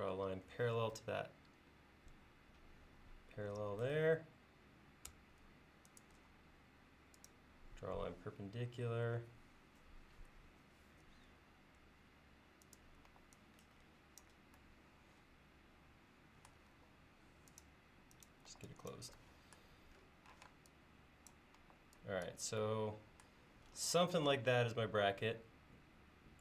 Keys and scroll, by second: 2.2 Page_Down, 6.3 l, 11.3 Down, 11.8 Down, 13.1 e, 16.7 l, 18.5 e, 20.4 p, 21.6 e.